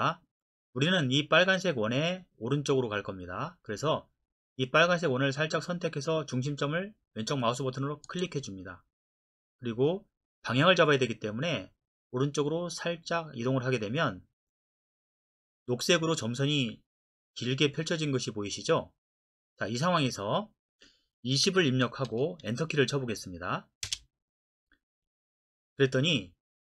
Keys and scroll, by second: 21.5-23.0 typing, 23.8 Return.